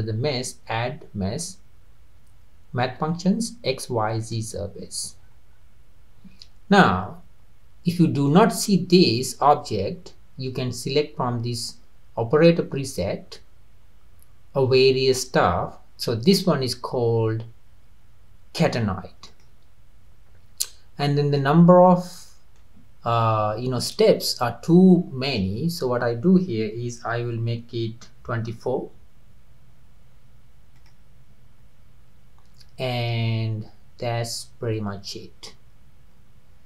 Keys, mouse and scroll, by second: 5.2-6.5 scroll down 6, 8.3-11.4 middle drag, 12.9-16.0 drag, 21.4-24.4 middle drag, 25.3-28.4 drag, 34.0 click, 35.3 click.